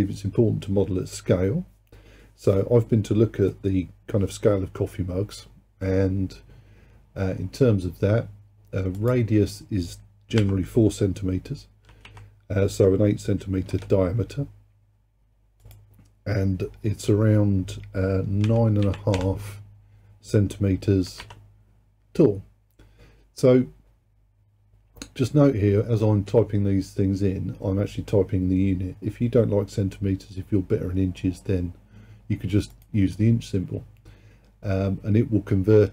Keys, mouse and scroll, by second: 9.0-12.2 drag, 15.7-18.8 drag.